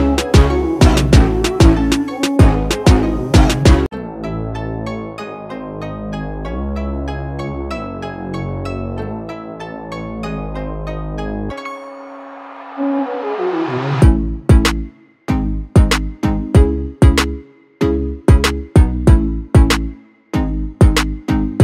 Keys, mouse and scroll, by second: 1.7-3.2 drag, 3.2-13.1 drag, 15.3-20.1 shift+drag, 20.7 ctrl+space, 20.8 ctrl+click, 21.2 ctrl+space.